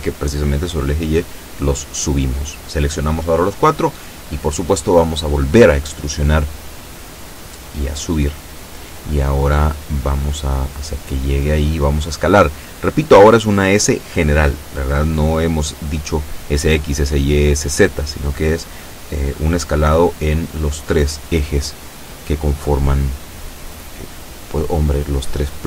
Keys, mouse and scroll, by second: 1.6 b, 1.8-2.8 drag, 3.9 e, 6.0 click, 7.1-8.4 drag, 9.0-10.5 drag, 10.8 s, 12.0 click, 12.8-13.9 drag, 15.7 a, 17.3 b, 17.7 click, 18.8-20.1 drag, 20.7 a, 21.1 b, 21.5 click, 22.8-23.8 drag, 24.3-25.5 drag.